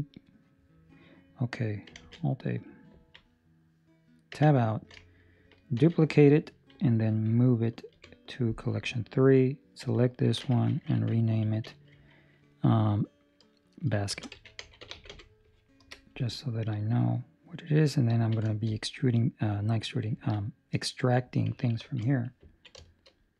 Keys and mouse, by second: 2.3 alt+a, 2.3 middle click, 2.9 ctrl+middle click, 3.1 middle click, 4.3 Tab, 5.7 shift+d, 7.8 m, 9.3 right click, 9.7 Escape, 11.3 F2, 16.6 middle click, 18.1 ctrl+middle click, 18.5 shift+middle click, 18.7 middle click, 20.3 ctrl+middle click, 20.3 middle click, 21.8 ctrl+space, 22.6 ctrl+middle click, 22.7 shift+middle click.